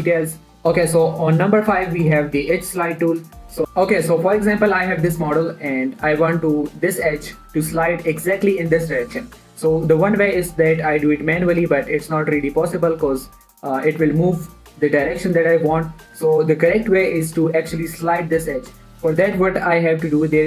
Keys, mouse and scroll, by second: 0.5 middle click, 2.2 click, 2.5 Tab, 3.6 click, 5.0-5.7 scroll up 1, 5.7 middle click, 9.2-9.5 scroll up 1, 9.5 1, 10.0 shift+middle click, 11.1 g, 12.1 right click, 12.4 g, 13.4 right click, 13.7 g, 15.3 right click, 16.0 scroll down 1, 16.1 middle click, 19.1 middle click, 19.3-19.8 scroll up 1.